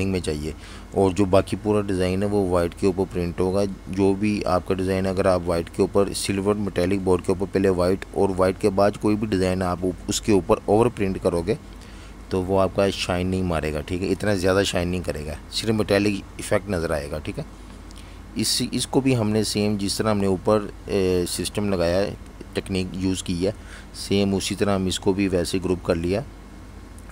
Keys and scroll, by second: 1.6 shift+super+], 2.8 super+3, 6.5 super+3, 8.3 super+3, 11.4 super+3, 14.4 super+3, 21.5 super+g, 23.1 typing, 24.5 alt+super+3.